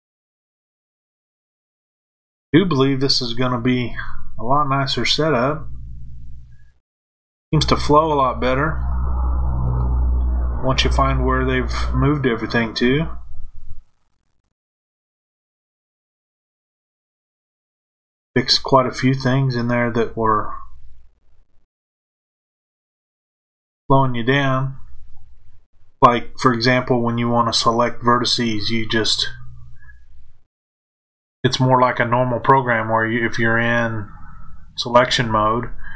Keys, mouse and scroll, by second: 1.2 shift+click, 3.8 f, 9.7 click, 14.9 shift+click, 16.3 f, 19.4 click, 21.2 shift+click, 23.7 f, 25.1 click.